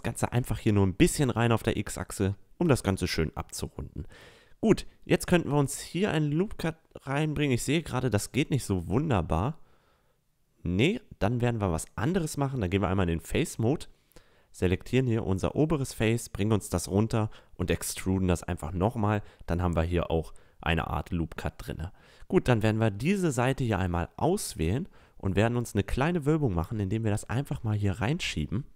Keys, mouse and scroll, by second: 1.1 Tab, 1.4 middle drag, 1.8 middle drag, 2.8 middle click, 3.0 middle click, 3.4 middle click, 4.1 Tab, 5.2 a, 5.7 ctrl+r, 8.7-9.1 drag, 9.6 ctrl+r, 13.9 right click, 15.0-17.7 middle drag, 17.7-18.2 drag, 18.8 e, 20.3-22.5 drag, 22.5 right click, 23.6-26.2 drag, 26.2-27.6 middle drag, 27.6 right click, 28.5-28.7 right drag.